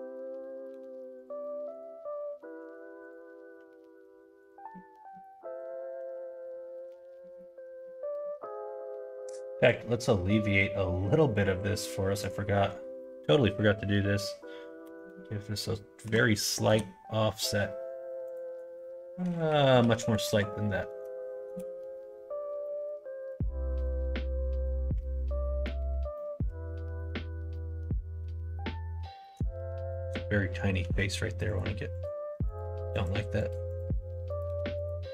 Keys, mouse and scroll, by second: 2.1 g, 3.0 click, 3.4 g, 4.6 middle click, 5.3 middle click, 5.8 middle click, 6.2 middle click, 6.6 shift+middle click, 7.1 middle click, 7.8 middle click, 12.2-17.6 drag, 18.2-22.2 drag, 19.9 Right, 22.6-25.6 middle drag, 26.1 middle click, 26.9 middle click, 27.5 middle click, 28.5 middle click, 29.1 shift+middle click, 29.8 middle click, 30.8 3, 31.5 click, 31.9 click, 32.9 click, 33.4 click, 33.7 click, 34.7 click.